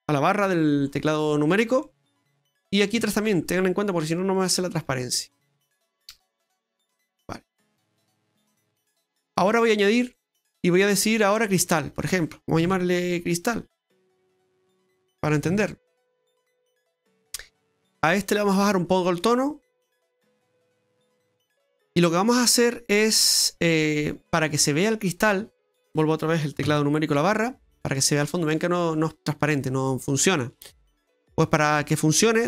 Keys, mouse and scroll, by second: 0.9-1.8 scroll up 2, 1.8 middle click, 3.2 shift+right click, 3.5 shift+right click, 4.0 shift+right click, 4.5 shift+right click, 5.5 shift+right click, 5.8 shift+right click, 6.1 shift+right click, 6.7 shift+right click, 7.0 shift+right click, 7.5 shift+right click, 8.5 shift+right click, 10.0 click, 11.3 click, 13.8 click, 13.9 click, 18.2 click, 21.9 scroll down 1, 22.3 middle click, 22.9 middle click, 23.9 middle click, 27.7-28.0 scroll down 2, 28.0 middle click, 31.3 middle click, 32.1 scroll up 1, 32.2 middle click.